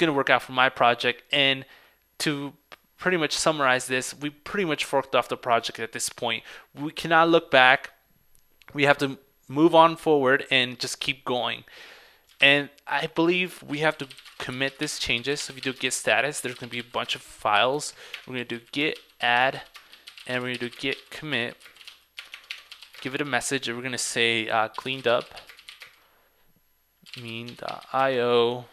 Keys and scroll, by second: 12.5 super+Tab.